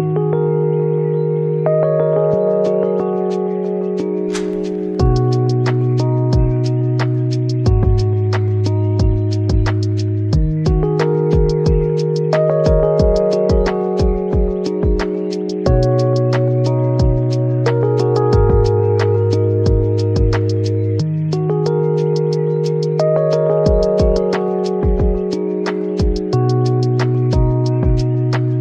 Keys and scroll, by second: 22.1 z, 27.7 s.